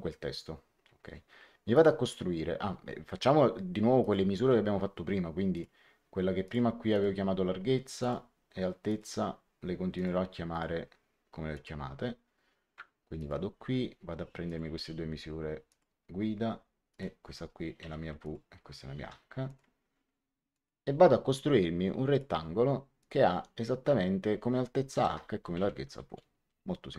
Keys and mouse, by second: 1.6 click, 3.9 click, 5.4 click, 7.9 click, 9.9 click, 13.1 click, 14.4 click, 15.6 click, 16.8 click, 17.7 w, 18.1 click, 18.9 h, 19.4 click, 20.5 click, 22.0 click, 24.8 h, 25.0 Tab, 25.2 w, 25.8 Return, 25.8 KP_Enter.